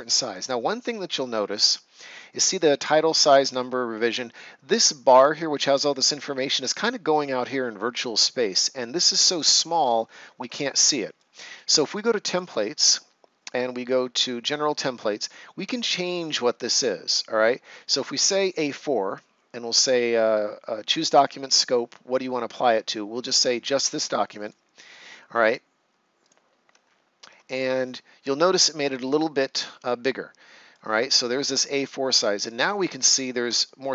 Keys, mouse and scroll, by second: 0.7-1.1 ctrl+scroll up 1, 8.5 right click, 10.2 ctrl+scroll down 1, 10.5 right click, 12.3 click, 18.2 click, 24.4 click, 26.7 ctrl+scroll down 1, 27.4 right click, 30.9-32.1 scroll up 1, 32.1 right click, 32.8-33.1 ctrl+scroll up 1.